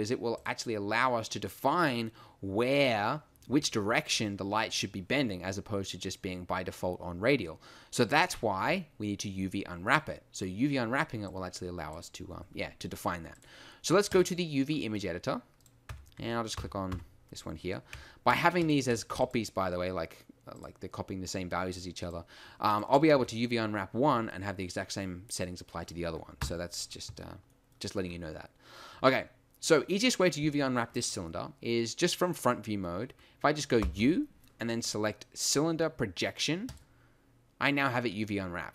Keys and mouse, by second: 11.6 middle click, 15.9 Tab, 16.5 a, 16.9 a, 17.9 Tab, 23.2 Tab, 26.4 KP_1, 36.7 u.